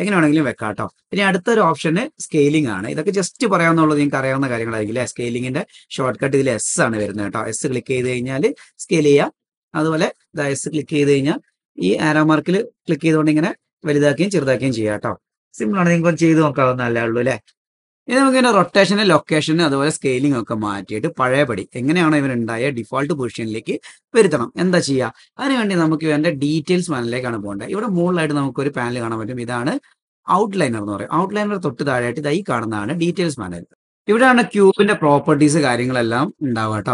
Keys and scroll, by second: 5.7 s, 8.5 Home.